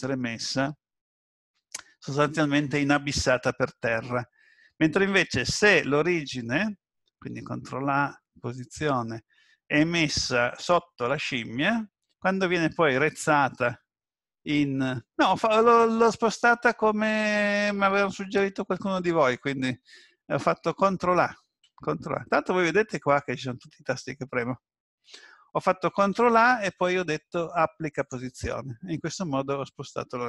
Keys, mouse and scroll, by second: 7.3 ctrl+a, 19.9 ctrl+z, 21.7 ctrl+a, 26.1 ctrl+a.